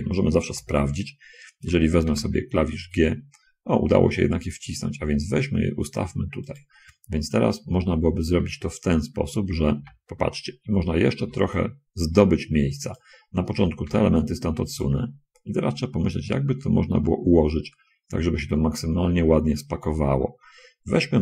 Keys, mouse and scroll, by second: 0.8 l, 2.4 g, 6.8 click, 10.1 a, 11.5 b, 11.9-13.5 drag, 14.2 g.